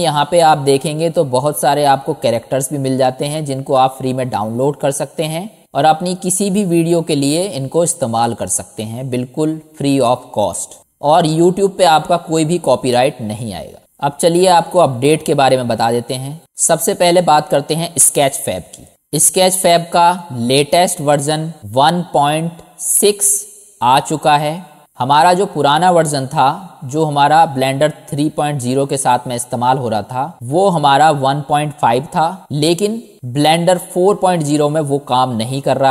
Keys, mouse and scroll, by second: 26.6 middle click, 27.1 middle click, 27.6 middle click, 28.3 middle click, 28.8-30.3 drag.